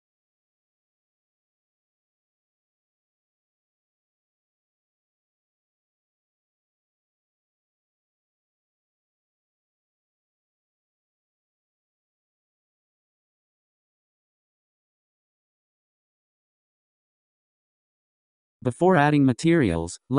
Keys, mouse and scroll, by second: 5.0-5.9 scroll down 5, 7.0 scroll up 4, 8.1 click, 9.0 m, 10.4 m, 11.1-11.5 scroll down 6, 12.6-14.1 scroll down 4, 14.1-15.0 scroll up 8, 15.0-15.4 scroll down 7, 16.0 scroll down 2, 16.5 scroll up 3, 17.3 scroll down 3, 17.8-18.7 scroll up 5, 18.7 scroll down 4, 19.1-20.1 scroll up 4.